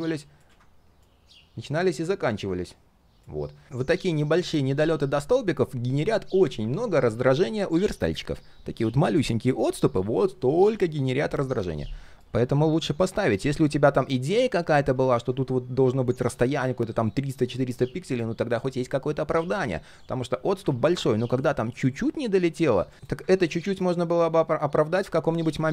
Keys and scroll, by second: 0.4 ctrl+z, 20.6 ctrl+z, 23.2 ctrl+z.